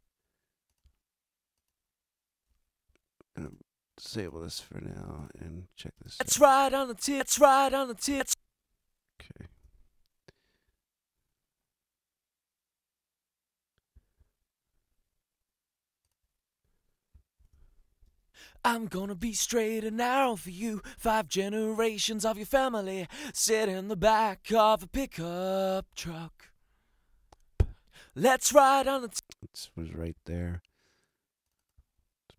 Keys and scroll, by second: 5.9 super+space, 8.1 space, 9.5 super+=, 17.4 super+=, 18.1 super+space, 18.6 space, 28.9 space.